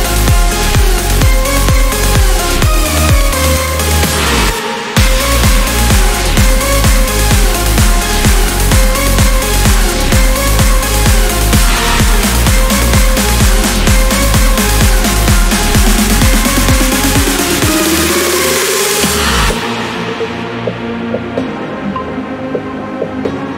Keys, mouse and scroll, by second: 4.6 click, 6.5 click, 7.9 click, 8.5 click, 9.2 click, 10.7 click, 11.5 click, 12.3 click, 13.4 click, 19.1 7, 20.0 5, 21.0 click, 22.3 5, 23.4-23.5 drag.